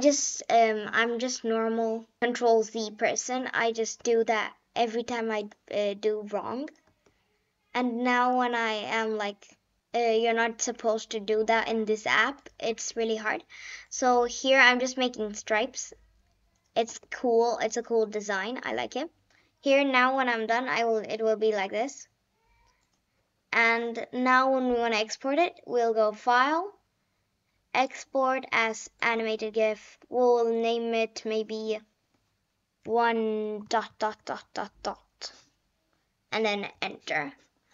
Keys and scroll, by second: 4.0 Return, 6.8 Return, 8.1 Return, 9.8 Return, 12.6 Return, 16.8 Return, 32.4-34.5 typing, 36.6 Return.